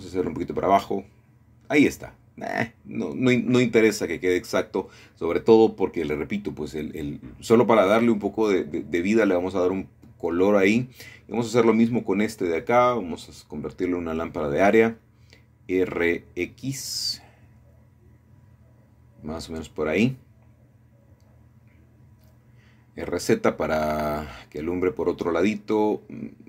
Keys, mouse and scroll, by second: 0.1 Return, 1.9 r, 2.2 y, 3.4 click, 4.5 middle click, 4.7-5.9 scroll up 1, 5.7 shift+middle click, 6.4 click, 8.8 click, 11.2 click, 12.3-14.0 shift+middle drag, 12.8-14.0 scroll down 1, 14.1 click, 16.4 click, 17.3 click, 18.1 r, 18.5 x, 21.7 click, 22.7 r, 23.3 z, 25.5 click.